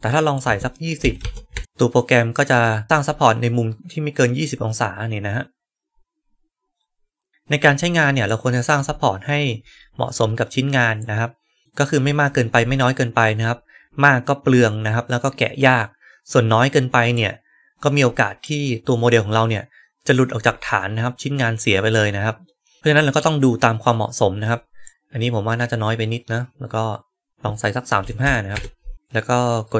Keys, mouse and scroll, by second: 2.8-4.4 right drag, 7.3 right click, 7.9-8.5 right drag, 10.9-11.6 right drag, 17.1-18.3 right drag, 22.3-22.8 middle drag, 23.1-24.7 right drag.